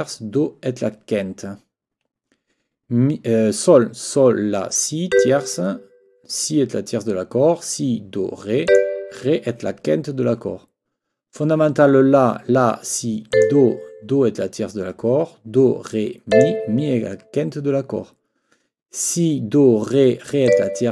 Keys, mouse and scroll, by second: 5.1 click, 8.7 click, 13.3 click, 16.3 click, 20.4 click.